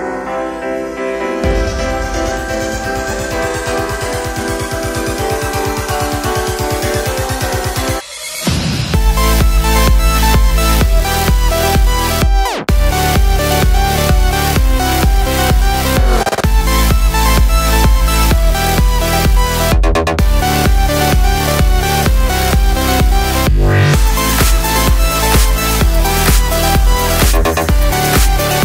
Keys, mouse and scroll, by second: 1.2 Return, 1.8-6.2 shift+drag, 9.0 right click, 9.9 click, 11.6-14.5 drag, 15.1 click, 16.3 Up, 18.1 click, 18.5 Down, 20.3 click, 21.3 Right, 23.1 click, 23.4 Left, 25.2-27.5 drag.